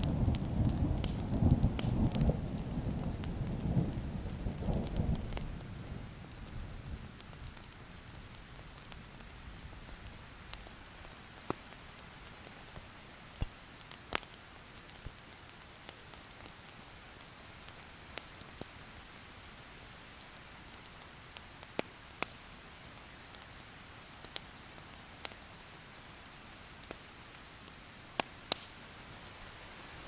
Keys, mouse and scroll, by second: 1.0 alt+scroll up 1, 1.4-7.6 drag, 7.7 alt+scroll down 1, 7.9 click, 8.0 scroll up 3, 10.2-10.7 ctrl+scroll up 2, 10.7 click, 13.4 ctrl+z, 13.7 alt+scroll up 1, 13.9-14.3 ctrl+scroll down 1, 14.5 click, 17.3 KP_8, 17.9-23.4 drag, 23.5 Delete, 25.1 click, 26.2 Delete, 26.6 click, 27.0 Delete, 28.3 Delete, 28.5 Delete, 29.2 ctrl+z, 29.8 click.